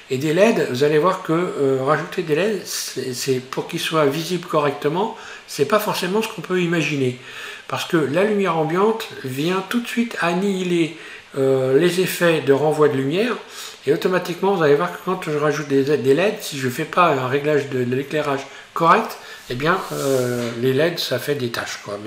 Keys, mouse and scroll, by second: 0.6 scroll down 1, 2.2 scroll up 1.